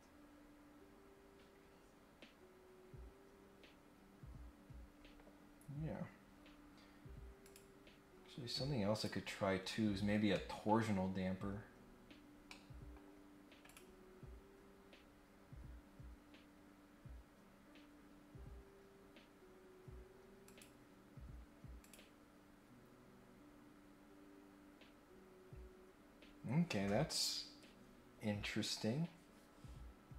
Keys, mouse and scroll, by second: 7.4 click, 8.9 click, 9.4-10.3 scroll up 3, 10.3 middle click, 11.1 scroll up 1, 11.4 scroll down 1, 11.9-12.4 scroll up 2, 12.5 middle click, 13.6 click, 20.4 click, 21.8 click, 27.0-27.5 scroll up 1.